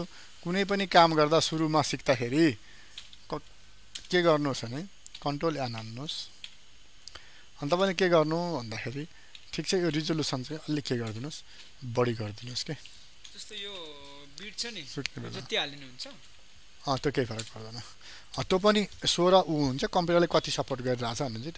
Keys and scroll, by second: 3.5 ctrl+n.